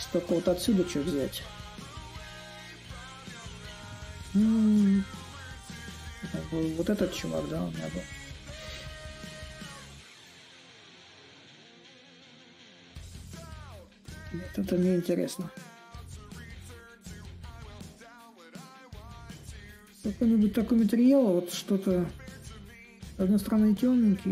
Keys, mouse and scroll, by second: 3.1-4.9 right drag, 4.9-18.0 drag, 19.3-24.3 drag.